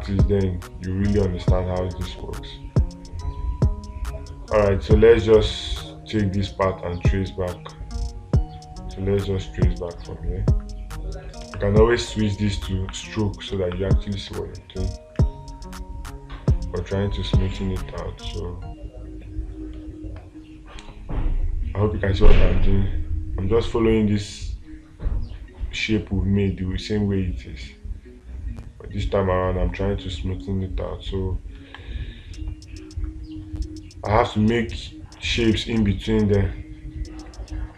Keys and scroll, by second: 11.9 space, 14.0 space, 20.2 space, 32.0 space.